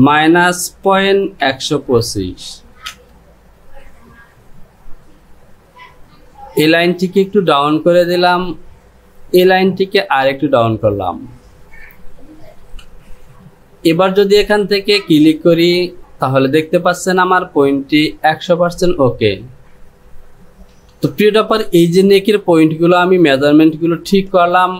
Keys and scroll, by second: 20.9 Delete.